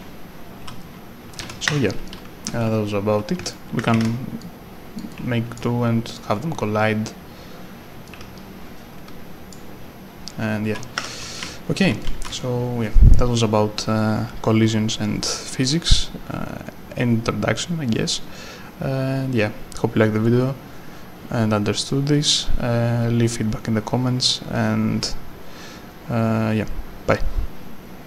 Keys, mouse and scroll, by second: 1.7 Escape, 1.7-3.4 typing, 2.1 right click, 3.9 ctrl+d, 4.4 click, 5.1 right click, 6.1 click, 8.1 click, 8.2 w, 10.1-12.7 typing, 11.3 right click, 12.0 right click, 18.4-19.7 scroll up 1, 22.2-22.9 scroll down 1.